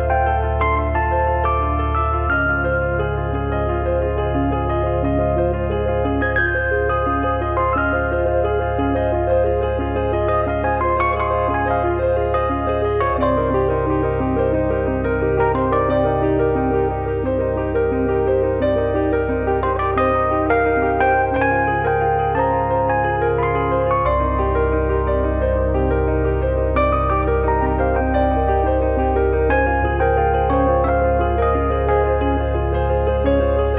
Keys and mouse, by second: 0.3 alt+z, 1.6 click, 2.1 e, 3.9 click, 4.3 f, 4.7 alt+z, 4.8 middle click, 5.8 e, 6.7 click, 7.2 f, 7.4 middle click, 10.0 click, 10.5 e, 11.4 click, 11.8 f, 12.0 middle click, 13.3 click, 14.1 e, 15.0 click, 15.8 f, 16.2 click, 16.6 z, 17.0 click, 17.5 click, 18.0 f, 18.1 middle click, 19.2 alt+z, 20.0 click, 20.2 middle click, 20.8 shift+middle click, 22.6 click, 22.8 e, 23.6 click, 24.1 f, 24.8 click, 25.2 e, 25.6 click, 26.4 f, 26.5 click, 31.4 click, 32.2 click.